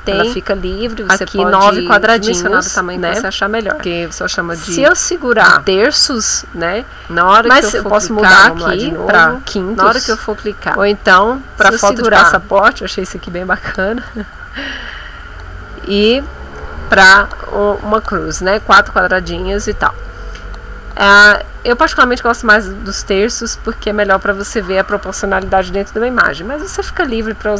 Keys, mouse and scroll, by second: 8.9 Escape, 10.5 click, 12.4 ctrl+shift+click, 13.6-18.5 ctrl+drag, 20.2-22.2 drag, 23.7 ctrl+Escape.